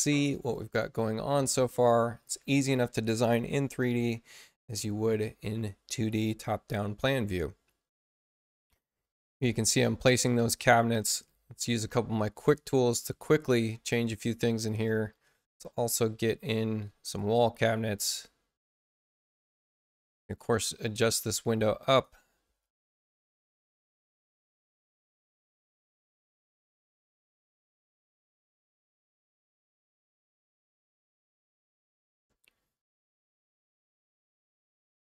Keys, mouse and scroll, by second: 0.2 click, 11.6 click, 12.3 click, 15.9 shift+b, 17.0 click, 18.0 click, 19.0 space, 20.2 click, 21.2 click, 21.7 Return, 22.2-23.0 typing, 23.1 click, 24.2 click, 24.6 Return, 25.1 1, 25.9 Return, 26.5 click, 27.4 click, 27.9 Return, 28.4 1, 28.8 Return, 31.5 click, 33.5 click.